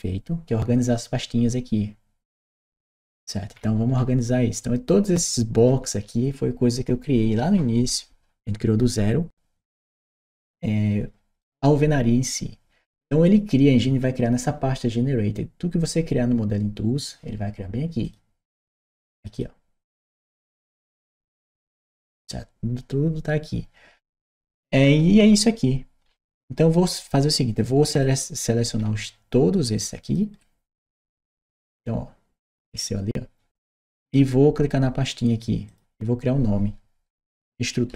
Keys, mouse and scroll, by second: 11.2 right click, 17.8 click, 19.0 click, 19.1 click, 27.8 click, 29.8 shift+click, 31.2-33.9 shift+right drag, 35.5 shift+click, 37.8 shift+e.